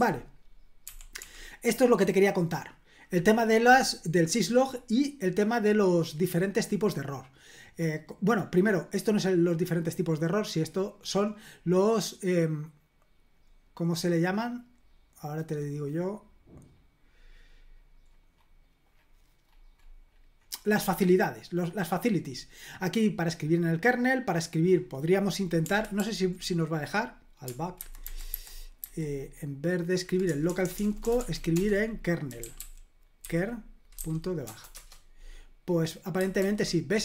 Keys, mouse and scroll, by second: 0.0 d, 0.9 d, 4.9-5.8 scroll down 2, 7.8-8.3 scroll down 1, 10.0-10.4 scroll down 1, 10.8-11.3 scroll down 1, 11.3-11.9 scroll up 2, 13.3-14.4 scroll up 3, 14.8-16.0 scroll up 3, 16.2-18.9 scroll down 6, 19.1-21.3 scroll up 4, 22.3-22.8 scroll down 2, 25.0 click, 26.0 ctrl+p, 27.8 alt+b, 28.0 alt+b, 28.3 alt+b, 28.8 alt+b, 30.3-34.4 typing, 34.7 Return, 36.4 super+l.